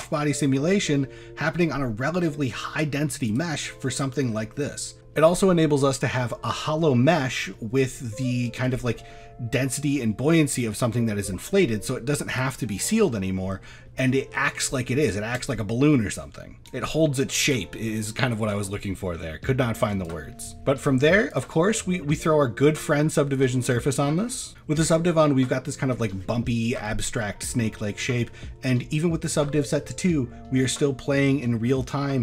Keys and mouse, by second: 0.0-0.4 middle drag, 1.1-1.5 middle drag, 3.3 click, 7.3 middle drag, 8.3 shift+middle drag, 12.3 click, 13.6 middle drag, 14.2 shift+middle drag, 15.1 shift+middle drag, 16.6 click, 17.4 click, 18.6 middle click, 19.6 shift+middle drag, 20.0 click, 20.5-22.7 drag, 23.9 shift+middle click, 25.3-25.9 middle drag, 27.3 middle click, 27.9 shift+middle click, 28.2 middle click, 29.2 click.